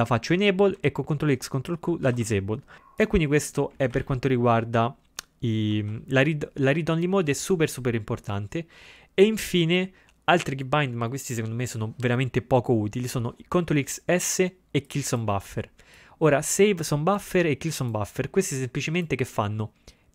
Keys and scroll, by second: 2.1 ctrl+x, 2.2 ctrl+q.